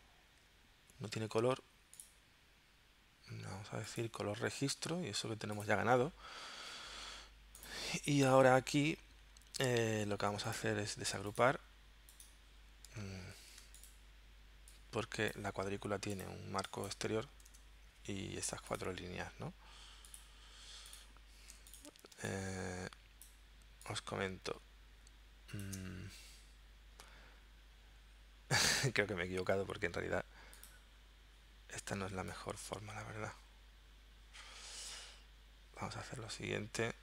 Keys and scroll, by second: 6.6 v, 13.4 shift+super+g, 17.5 BackSpace, 21.5 z, 22.2 space, 29.6 v.